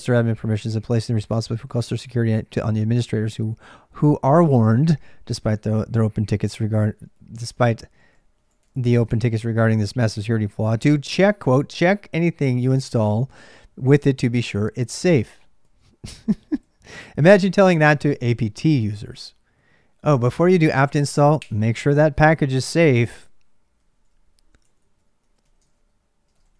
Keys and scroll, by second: 0.0-26.5 typing.